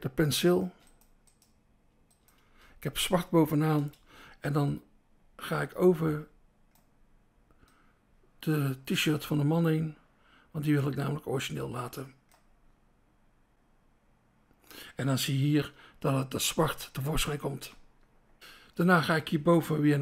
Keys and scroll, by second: 0.6 BackSpace, 2.4 BackSpace, 3.2 BackSpace, 3.8 BackSpace, 16.0 BackSpace.